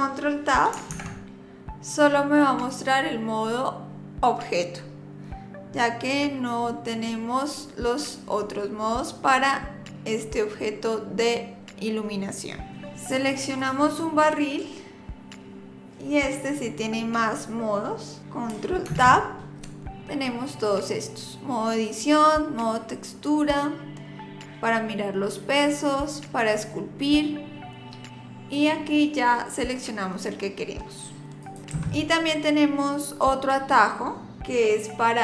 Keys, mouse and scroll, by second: 0.9 ctrl+Tab, 12.7 click, 13.6 click, 18.9 ctrl+Tab.